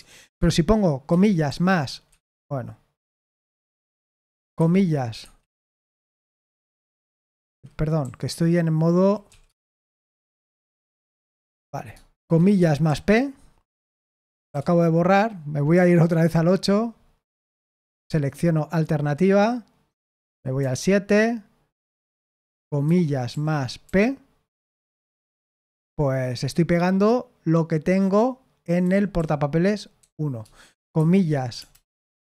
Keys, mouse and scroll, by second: 0.0-1.5 typing, 2.0 Escape, 3.5 typing, 4.5 typing, 5.1 Escape, 6.1 typing, 7.4 Escape, 7.4-10.1 typing, 11.4 Escape, 11.9-14.5 typing, 16.0 super+8, 20.5 super+7, 28.8-31.5 typing.